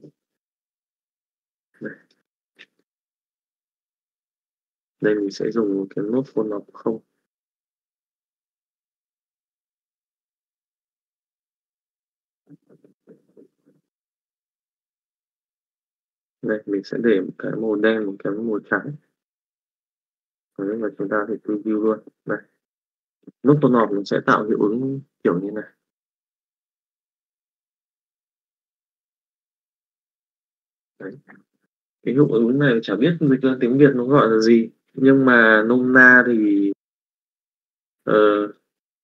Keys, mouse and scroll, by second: 1.9 click, 2.5 middle click, 3.2 KP_Divide, 4.5 click, 5.4 middle click, 6.4 shift+a, 8.9 click, 9.8 click, 16.8 click, 18.0 click, 18.5 click, 19.7 middle click, 20.0 z, 21.1 middle click, 22.0 middle click, 22.7 click, 23.3 shift+middle click, 24.0 alt+a, 24.2-30.5 middle drag, 31.0 middle click, 37.4-38.5 drag.